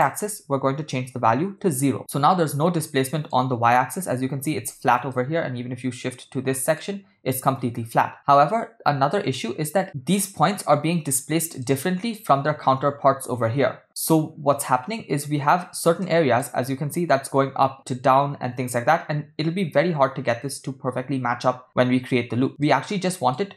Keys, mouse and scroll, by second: 2.0-3.3 middle drag, 5.1-6.8 shift+middle drag, 8.1-10.1 middle drag, 11.7-12.1 middle drag, 14.1-15.9 middle drag, 16.0-16.4 shift+middle drag, 22.7-23.3 middle drag.